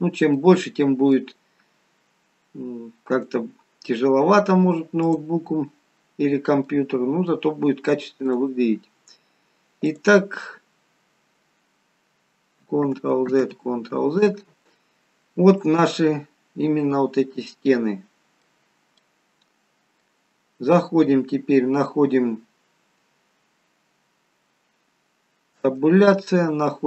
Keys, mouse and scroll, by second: 0.4 middle click, 0.4-1.7 scroll up 2, 3.1 click, 5.6-6.0 scroll down 3, 6.3-7.7 scroll up 2, 6.8 middle click, 8.2 click, 9.9 click, 12.9 ctrl+z, 15.6 middle click, 19.1 middle click, 25.7 Tab.